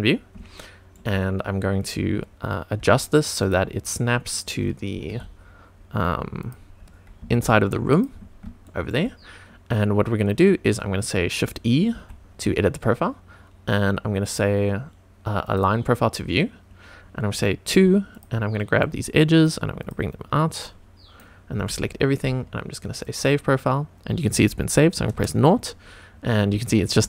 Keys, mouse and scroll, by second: 0.1-0.5 scroll up 2, 0.5-0.9 shift+middle drag, 2.7 g, 3.4 click, 4.9 g, 5.0 x, 6.4 click, 7.2 g, 7.2 y, 7.9 click, 8.6 shift+middle click, 11.9 shift+e, 15.4 click, 17.7 2, 18.0 click, 18.8 click, 19.7 click, 20.6 click, 21.5 a, 23.0 click, 25.1 KP_0, 26.1-26.6 scroll down 2, 26.6 shift+middle click.